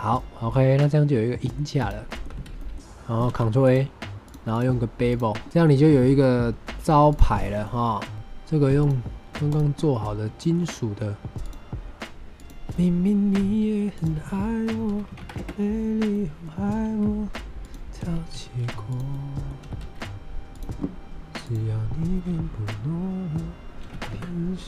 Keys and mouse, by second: 0.1-1.5 middle drag, 1.7 click, 2.0 middle drag, 2.2 Tab, 2.5 middle click, 3.2 ctrl+a, 4.1 click, 4.5-5.1 drag, 5.4 middle click, 6.1-6.8 middle drag, 7.0 click, 7.3 shift+middle drag, 7.5-7.9 middle drag, 8.1 click, 10.3 shift+middle drag, 10.6 middle drag, 11.3 click, 12.0 middle click, 12.6-12.9 drag, 13.2-15.1 typing, 13.8 click, 15.3 KP_Enter, 16.1-16.4 middle drag, 16.5 g, 16.6 x, 16.8 y, 17.5 click, 17.9 s, 18.2 y, 18.8 drag, 19.1-19.4 middle drag, 19.5 s, 19.7 x, 20.4 click, 21.4-24.5 drag.